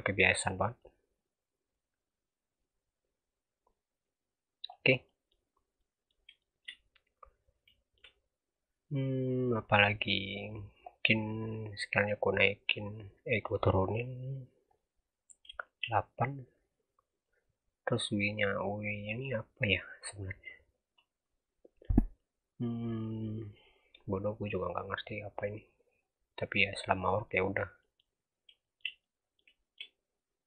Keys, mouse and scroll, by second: 0.8 click, 4.9 scroll down 3, 5.0 middle click, 5.4 scroll up 3, 5.7-6.8 middle drag, 6.8-7.3 scroll up 1, 7.3-7.6 scroll down 1, 7.6-8.4 shift+middle drag, 8.4 scroll down 2, 8.7-9.6 scroll up 2, 9.6 scroll down 1, 9.8 middle click, 10.4-11.3 scroll up 5, 11.3 click, 15.2 scroll down 4, 15.5 shift+middle drag, 15.8-17.2 scroll up 2, 17.2 click, 24.4 click, 27.6 scroll down 1, 27.7-28.0 middle drag, 28.0-28.6 scroll up 3, 28.6-29.7 shift+middle drag, 29.7-30.4 scroll up 3.